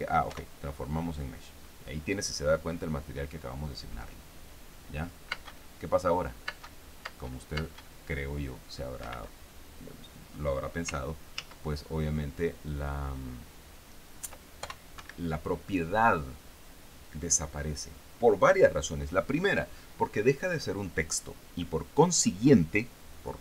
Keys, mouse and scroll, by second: 0.7 p, 5.8 space, 6.9 space, 9.4 Escape, 11.8 ctrl+z, 15.0 ctrl+p, 15.4 ctrl+Escape.